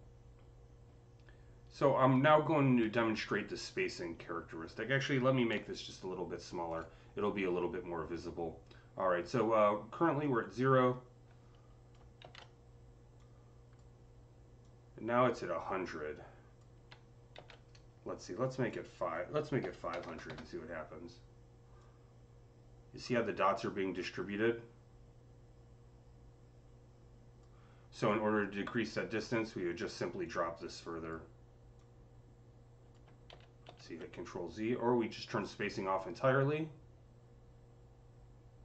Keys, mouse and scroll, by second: 5.4 ctrl+z, 5.4 click, 5.4-6.5 typing, 8.6 typing, 10.1-19.5 drag, 10.1 typing, 12.1 z, 17.2 ctrl+z, 19.5 KP_5, 19.8 KP_0, 19.9 KP_0, 20.1 Return, 21.6-29.4 drag, 30.1 Return, 30.1-31.7 drag, 31.7-35.3 drag, 33.1 ctrl+z, 33.5 ctrl+z, 35.9-38.6 drag.